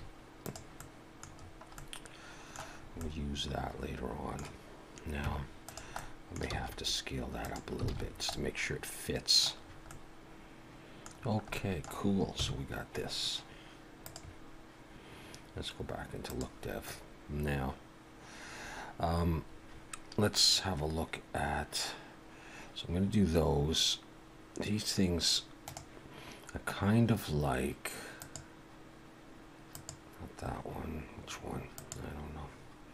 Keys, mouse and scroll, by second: 0.8 middle click, 1.3-2.8 scroll down 5, 1.7 middle click, 2.8 scroll up 2, 3.0 middle click, 5.3 Tab, 5.7 click, 6.0 middle click, 6.5 s, 7.4 click, 7.9 alt+a, 8.0-8.4 scroll down 3, 8.3 middle click, 9.6-9.9 scroll up 2, 9.9 middle click, 11.1-12.0 scroll down 3, 11.5 middle click, 12.3 KP_1, 14.0 click, 16.2 click, 16.8-17.3 scroll up 2, 18.3 scroll up 1.